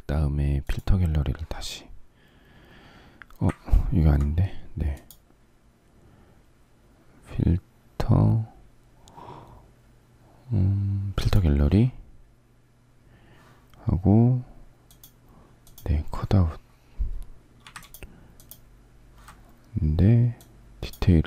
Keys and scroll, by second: 3.5 ctrl+z.